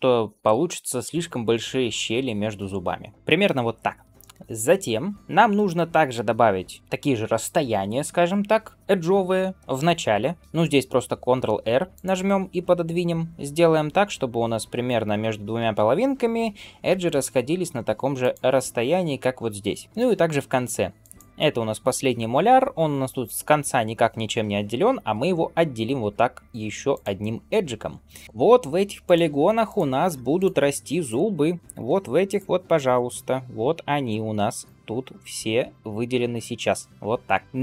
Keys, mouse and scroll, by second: 3.1 ctrl+z, 3.1-3.5 scroll up 1, 4.0 shift+middle click, 11.2 ctrl+r, 19.8 shift+middle click, 19.8 scroll down 1, 20.8 ctrl+r, 28.2 click, 28.2 3, 28.9 click, 29.5 click, 30.2 click, 30.9 click, 31.5 click, 32.1 click, 32.8-34.6 shift+click, 33.4 shift+click, 33.9 shift+click, 34.5 shift+click, 34.9 shift+click, 35.5 shift+click, 36.1 shift+click, 37.3 middle click.